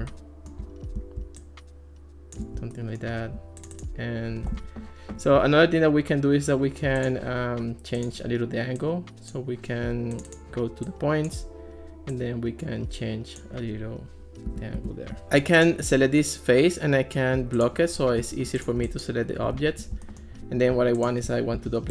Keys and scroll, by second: 4.5 Escape, 14.5 Escape, 21.6 super+d.